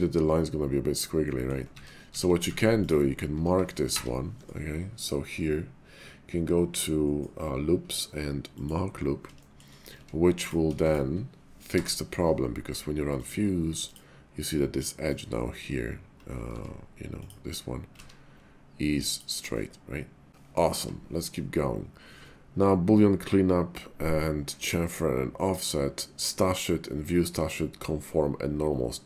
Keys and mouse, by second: 1.2 middle click, 1.7 ctrl+z, 2.0 ctrl+z, 2.4 Tab, 2.8 click, 3.9 y, 9.4 shift+middle click, 9.9 Tab, 10.4 click, 10.8 shift+click, 11.6 y, 15.0 click, 16.4 Tab, 17.1 click, 18.0-20.3 ctrl+z, 19.0 ctrl+click, 19.5 middle click, 20.7 y.